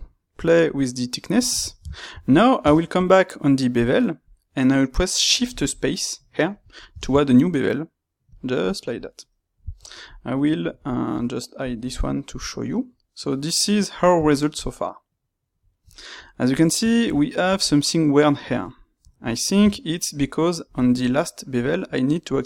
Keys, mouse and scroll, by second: 9.9 click, 11.5 click, 12.0-19.1 middle drag, 19.1 click, 20.2 space.